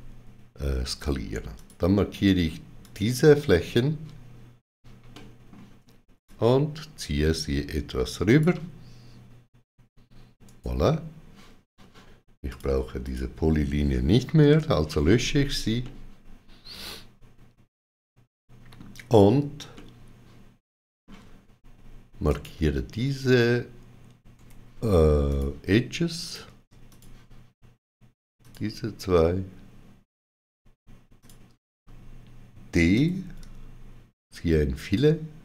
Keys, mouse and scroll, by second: 1.4 click, 2.7 shift+click, 5.0 middle click, 6.1 shift+click, 10.3 right click, 12.6 click, 12.9 shift+click, 15.7 middle click, 19.6 shift+middle click, 22.2 click, 24.2 2, 25.1 click, 26.1 click, 26.8 shift+click, 28.3 shift+click, 31.0 shift+click, 32.8 d.